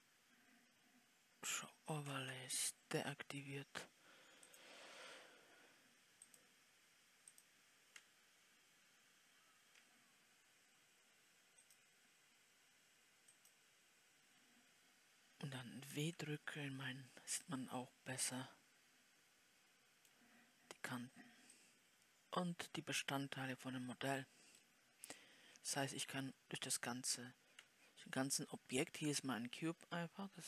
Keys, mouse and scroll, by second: 2.1 Escape, 4.9-10.8 drag, 18.0-30.4 middle drag.